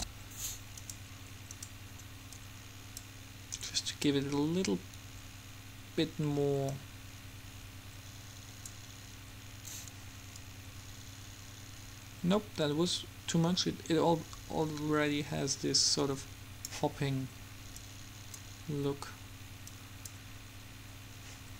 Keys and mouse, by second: 0.0 ctrl+z, 1.0-5.5 drag, 6.9-8.5 drag, 10.5-12.5 drag, 18.0-19.5 drag, 19.9-21.5 drag.